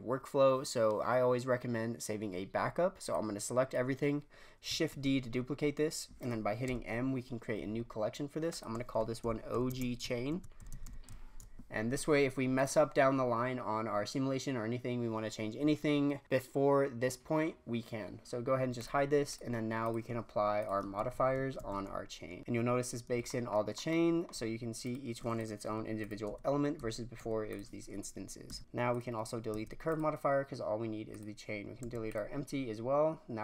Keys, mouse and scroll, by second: 3.1 click, 4.9 shift+d, 6.6 m, 18.7 click, 19.3-20.0 drag, 20.5 click, 20.9 a, 21.5 a, 22.1 scroll up 1, 22.4 click, 24.8 click, 25.6 l, 26.0 click, 26.2 l, 26.7 l, 27.1 l, 27.5 click, 28.4 Tab, 28.9 click, 29.5 x, 31.0 click, 31.8 x.